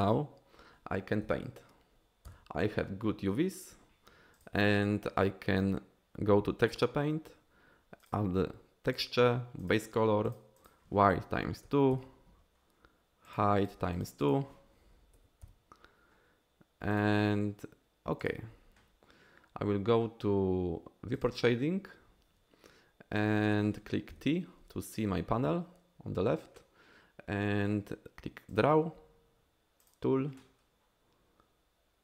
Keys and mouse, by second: 0.0 click, 1.3 KP_1, 2.3 Tab, 4.4-6.8 drag, 9.5-18.3 drag, 21.2 click, 24.1 t, 28.5 click, 29.9 click.